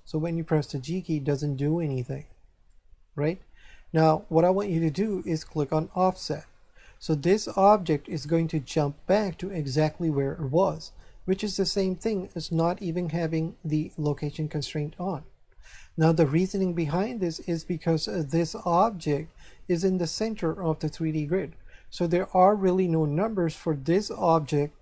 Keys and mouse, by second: 0.5 g, 1.8 right click, 2.7 click, 5.9 click, 14.0 click, 16.8 click, 18.5 right click, 24.4 right click.